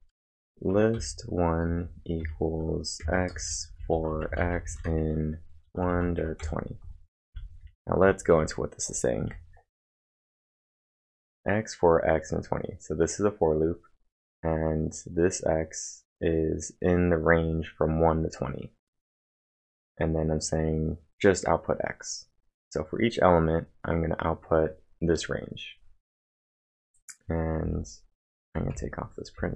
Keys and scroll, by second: 0.0-9.2 typing, 27.6 typing.